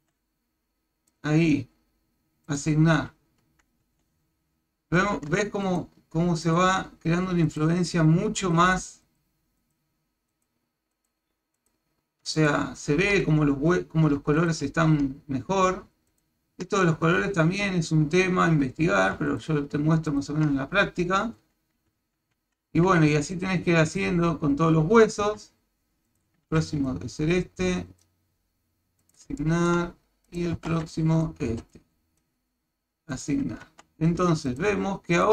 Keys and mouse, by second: 0.0 b, 2.6 click, 3.8 Tab, 5.7 ctrl+click, 6.5 ctrl+click, 7.5 ctrl+click, 8.4 ctrl+click, 9.1 ctrl+click, 9.6 ctrl+click, 10.3 ctrl+click, 11.0 ctrl+click, 11.6 ctrl+click, 12.4 ctrl+click, 14.4 ctrl+click, 16.1 ctrl+click, 19.3 ctrl+click, 20.1 ctrl+click, 21.4 Tab, 22.0 Tab, 22.4 Tab, 23.6 Tab, 24.0 Tab, 25.2 a, 26.1 click, 26.5 b, 29.4 shift+middle click, 30.3 click, 30.6 a, 30.7 b, 31.5 b, 33.7 Tab, 34.5 ctrl+click, 35.2 ctrl+click.